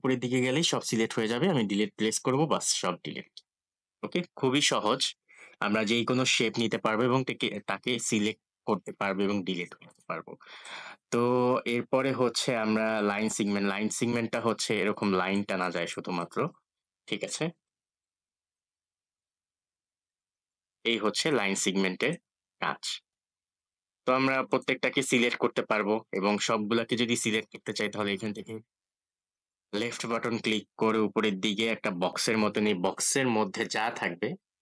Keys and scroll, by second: 1.4 Delete.